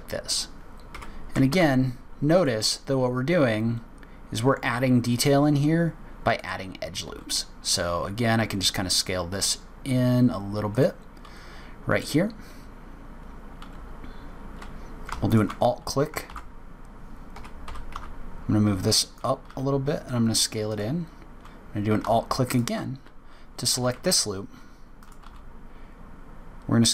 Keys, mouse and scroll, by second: 1.5 r, 7.0 s, 15.3 alt+click, 16.3 ctrl+g, 17.7 g, 19.4 s, 22.5 alt+click, 23.7 g, 25.2 s.